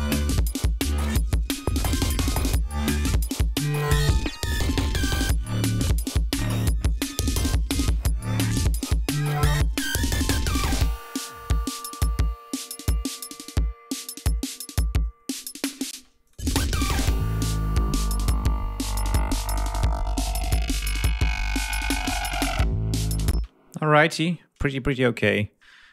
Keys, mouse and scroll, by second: 1.0 ctrl+scroll up 2, 1.7 ctrl+scroll down 2, 2.6-2.9 scroll down 2, 3.2 ctrl+scroll up 2, 4.3 scroll down 2, 5.6 ctrl+scroll down 2, 5.9 ctrl+scroll up 2, 10.1 ctrl+scroll up 2, 12.1-12.4 scroll up 2, 13.4 ctrl+scroll down 2, 14.0 ctrl+scroll down 2, 14.9 ctrl+scroll up 2, 15.9 space, 16.3 click, 22.5 click, 23.4 space, 24.0 scroll up 2, 24.9-25.5 ctrl+scroll up 4.